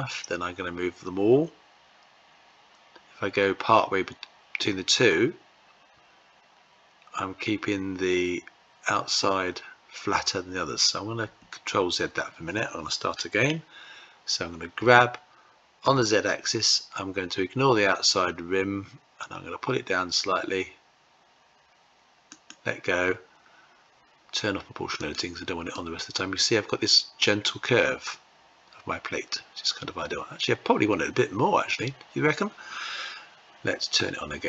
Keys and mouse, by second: 14.5 g, 24.7 click, 25.4-31.4 middle drag.